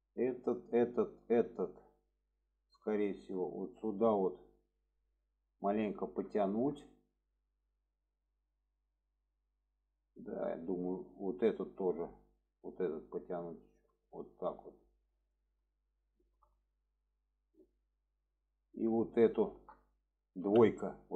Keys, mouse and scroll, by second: 0.4-1.1 drag, 1.4 middle click, 2.0-2.4 middle drag, 3.3 click, 4.8-6.2 middle drag, 6.4 shift+middle drag, 7.5-10.5 middle drag, 11.0 middle click, 11.9 click, 12.4 middle click, 13.5 click, 15.6 middle drag, 16.1-16.5 shift+middle drag, 16.6-17.5 alt+middle drag, 18.3-18.9 alt+middle drag, 19.5 shift+middle click.